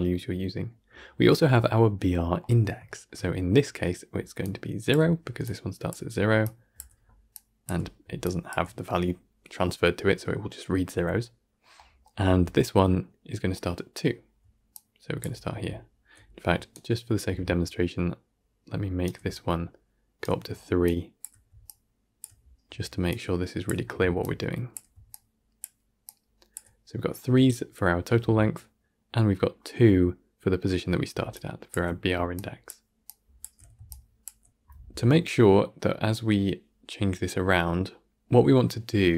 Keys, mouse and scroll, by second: 6.6 d, 7.2-16.6 drag, 16.6-20.7 right drag, 20.7-39.1 drag.